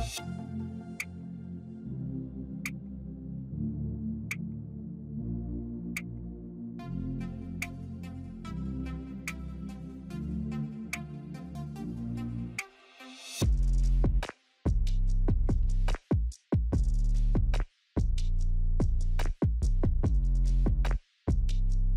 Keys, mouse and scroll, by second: 12.2 click, 15.7-21.9 alt+shift+drag.